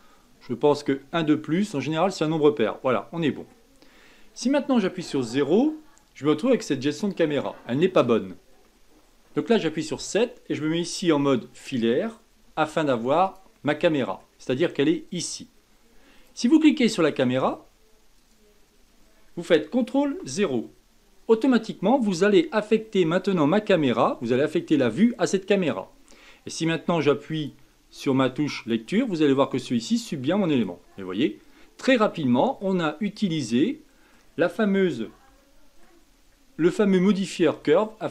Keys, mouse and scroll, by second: 2.0 click, 2.8-5.0 middle drag, 5.0 KP_0, 8.6 middle click, 8.7 KP_7, 11.1-12.4 middle drag, 12.4 z, 13.7-15.0 middle drag, 15.0 click, 16.1 click, 17.0 click, 18.1 click, 20.0 ctrl+KP_0, 27.4-32.2 drag, 32.2 middle click, 32.9-33.4 scroll down 5, 33.4-36.1 middle drag, 36.1-36.9 scroll down 3, 36.9 shift+middle click, 37.7-38.1 scroll down 3.